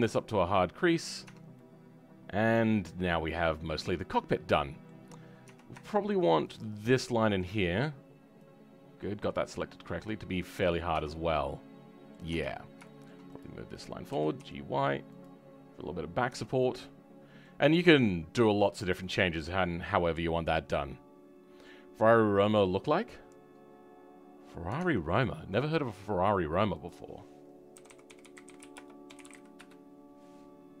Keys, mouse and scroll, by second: 0.2-1.5 drag, 1.5-5.1 middle drag, 5.1-5.4 scroll up 2, 5.4 Tab, 5.8 shift+middle click, 6.6 click, 7.1-8.4 middle drag, 8.4-11.1 drag, 11.1-11.5 scroll down 2, 11.5 middle click, 12.3 Tab, 12.5-12.8 scroll up 2, 12.8 shift+middle click, 13.4 click, 15.5-16.3 scroll down 4, 16.3 Tab, 16.6-17.6 middle drag, 17.6-18.6 scroll up 3, 18.6-19.0 scroll down 4, 19.0-30.8 middle drag.